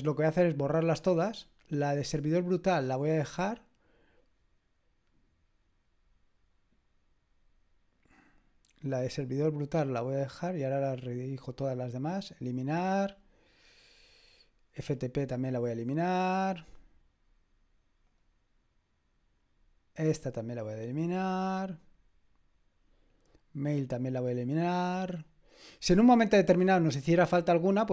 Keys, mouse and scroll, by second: 10.1 click, 12.4 click, 16.4 click, 18.0 click, 20.1 click, 21.8 click, 24.1 click, 25.3 click.